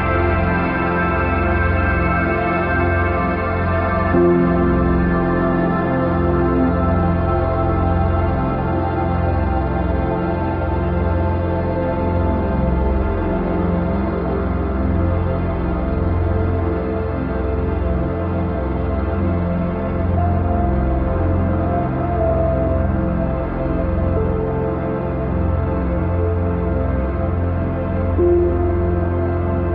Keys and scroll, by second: 7.2 ctrl+j, 20.1 ctrl+0, 20.6 ctrl+-, 22.1 ctrl+=.